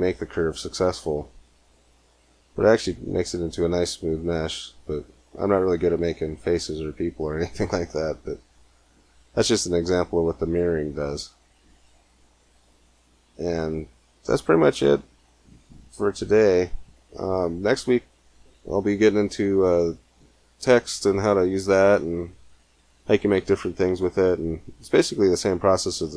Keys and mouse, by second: 1.3 middle click, 2.4 Tab, 6.0 middle click, 9.9-12.0 middle drag, 12.4-13.9 middle drag.